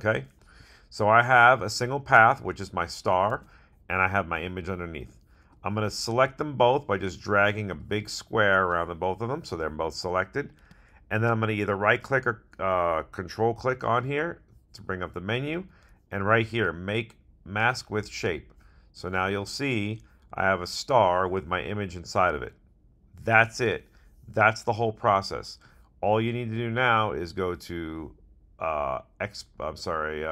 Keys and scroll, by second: 3.4 super+z.